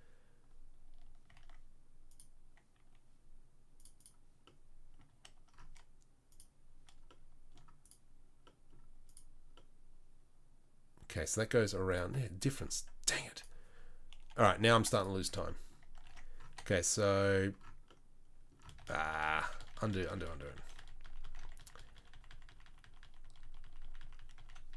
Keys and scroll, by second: 1.3 Tab, 14.3 Delete, 15.2 Tab, 15.8 Tab, 16.0 Tab, 16.4 3, 18.8-20.5 ctrl+z, 20.7 ctrl+z, 21.0 ctrl+z, 21.2 ctrl+z, 21.4 ctrl+z, 21.6 ctrl+z, 21.7-22.8 ctrl+z, 23.0 ctrl+z, 23.2 ctrl+z, 23.4 ctrl+z, 23.6 ctrl+z, 23.8 ctrl+z, 24.0 ctrl+z, 24.2 ctrl+z, 24.3 ctrl+z, 24.7 ctrl+z.